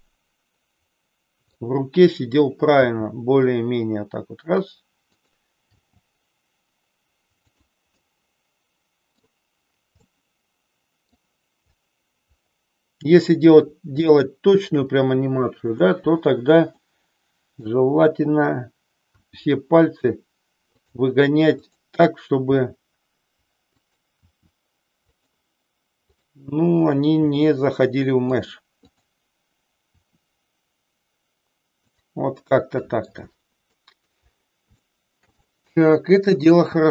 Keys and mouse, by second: 2.7 r, 5.1 click, 5.7 g, 7.6 click, 8.0-9.2 middle drag, 10.1-11.2 middle drag, 14.0 shift+middle click, 16.7 middle click, 19.2 r, 20.9 click, 21.6 click, 22.6 r, 23.9 click, 24.2 r, 25.1 click, 27.2 r, 28.7 click, 29.9 r, 32.5 middle click, 33.9 middle click, 34.9 shift+middle click, 35.5-36.6 middle drag.